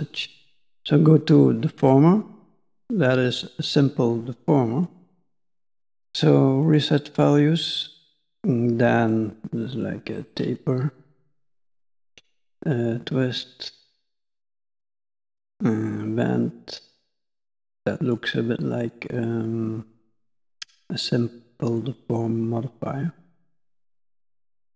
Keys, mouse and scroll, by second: 2.4 click, 4.8 click, 6.7 click, 9.2 click, 12.7 click, 15.4 click, 18.7 click, 22.0 click, 24.3 click.